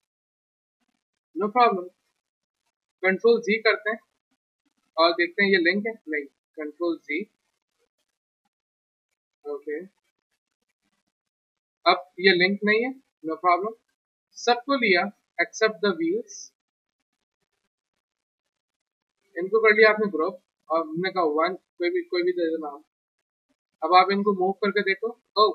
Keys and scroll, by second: 0.4 ctrl+z, 3.1 ctrl+z, 5.9 ctrl+z, 21.1 1, 23.3 w.